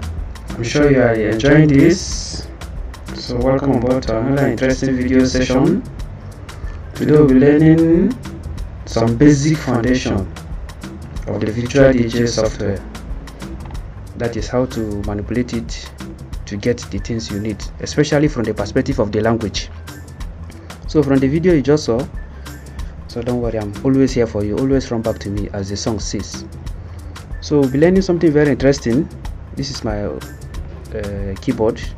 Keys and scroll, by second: 29.2-31.1 typing.